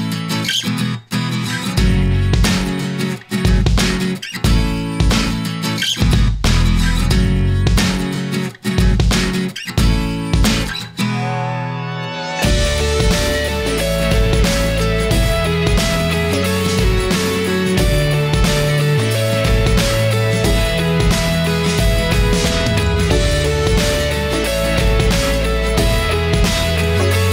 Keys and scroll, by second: 6.5 ctrl+t, 10.3 Return, 12.2 ctrl+0, 20.9 Return, 26.4 Return.